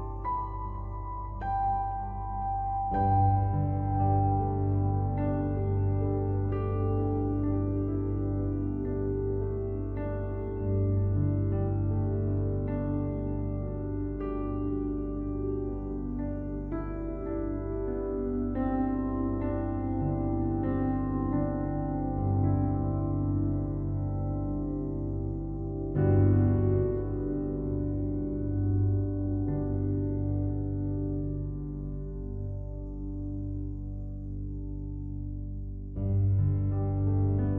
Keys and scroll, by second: 5.2 ctrl+t, 23.6 ctrl+t, 37.3 ctrl+t.